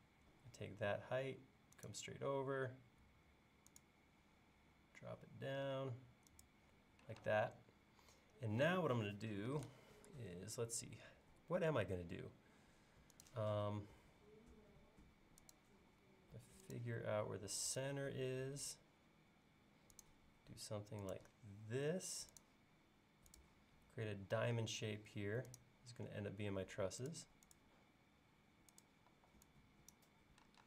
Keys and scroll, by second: 29.2 e.